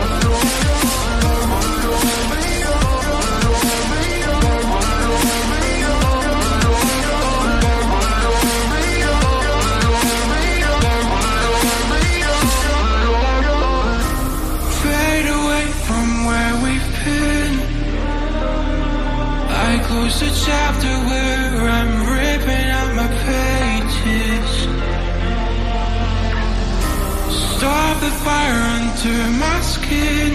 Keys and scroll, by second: 0.0-1.1 typing, 9.7 m, 17.6 ctrl+a, 21.6 ctrl+a, 21.6 ctrl+d, 24.2 ctrl+d, 25.2 ctrl+z, 28.6 ctrl+z.